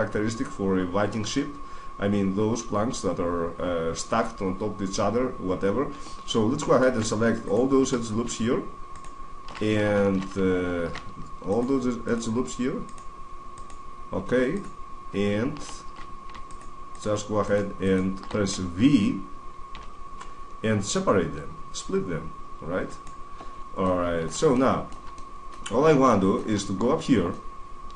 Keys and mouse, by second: 3.4 middle drag, 6.0-7.2 middle drag, 7.2-9.0 right drag, 9.9 ctrl+z, 14.3-19.4 right drag, 19.6 v, 22.8 right click, 23.5 middle click, 24.6 middle click, 24.8 middle click, 24.9 middle click, 25.1-27.9 middle drag.